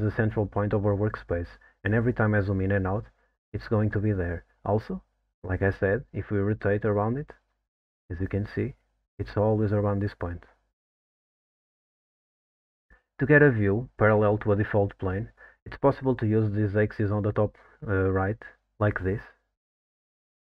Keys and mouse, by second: 5.0-8.9 middle drag, 9.3-11.9 middle drag, 19.1 click, 20.1 click.